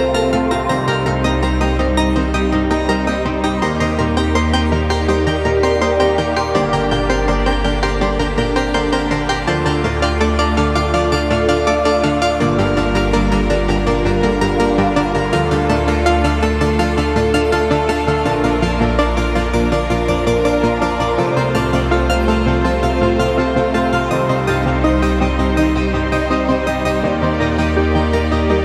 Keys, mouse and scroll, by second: 0.0 ctrl+space, 0.4 click, 0.9 shift+click, 1.2 Up, 2.1 click, 2.3 shift+click, 2.6 Up, 3.0 space, 3.2 ctrl+click, 3.9 ctrl+space, 4.7 click, 5.1 ctrl+;, 7.6 click, 14.5 Down, 20.9 Up, 24.8 click.